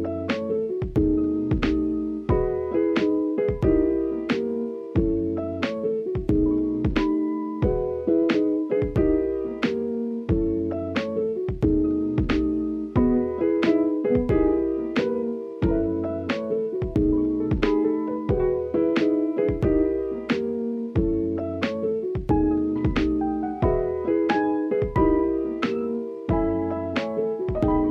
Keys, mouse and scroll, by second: 1.6-2.2 middle drag, 2.5 middle click, 2.8-3.3 scroll down 1, 3.3-3.7 middle drag, 3.9 shift+middle drag, 4.8-6.7 drag, 8.2-9.5 middle drag, 9.5 click, 9.7 Tab, 11.1 click, 11.4 click, 12.0 shift+click, 12.7 middle click, 13.4 middle click, 13.9 shift+middle click, 14.9 g, 16.0 click, 16.5 s, 17.7 middle click, 18.5 Tab, 18.8 right click, 19.9-20.3 middle drag, 20.4 shift+middle click, 21.0 KP_1, 21.6 alt+z, 23.8 ctrl+s, 24.7 s, 27.1-27.9 drag.